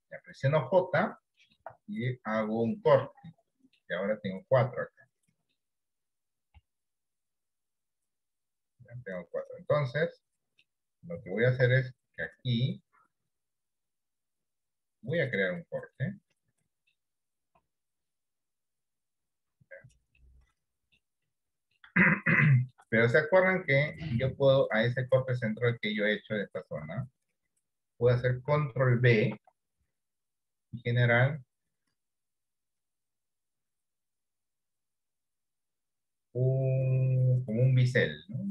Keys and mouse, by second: 3.1 middle click, 4.7 middle click, 6.7 KP_7, 9.9 middle click, 11.5 ctrl+r, 16.0 middle click, 17.7 KP_7, 20.3 middle click, 21.3 middle click, 22.1 shift+middle click, 23.6 middle click, 24.3 shift+middle click, 25.6 middle click, 26.4 shift+middle click, 29.3 ctrl+b.